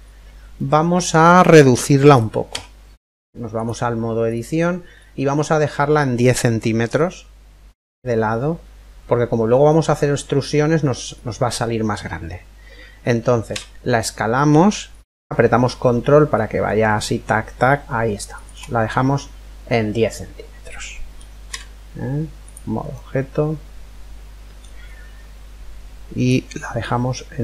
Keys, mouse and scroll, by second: 2.1 Tab, 3.8-4.5 scroll up 1, 4.5-5.9 middle drag, 4.5-5.3 scroll up 1, 5.3-5.9 scroll up 1, 5.9 scroll down 1, 6.1 middle click, 13.1 s, 18.5-20.5 middle drag, 21.1 Tab, 22.5-24.5 middle drag, 25.9 click.